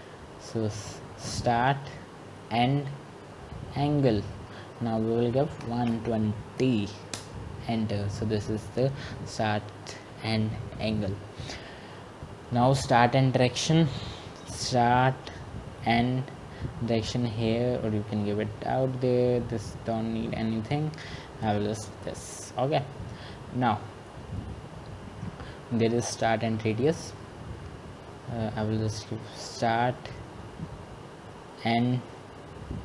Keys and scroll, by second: 0.0-1.4 typing, 7.1-7.9 typing.